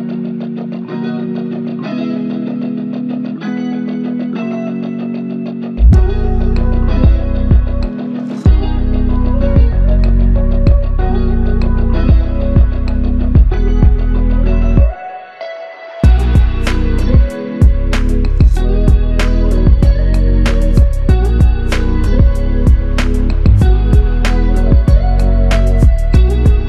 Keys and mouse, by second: 1.0 shift+click, 4.3 shift+click, 5.8 shift+click, 10.3 shift+click, 13.4 alt+click, 20.2-21.0 s, 23.3 double click.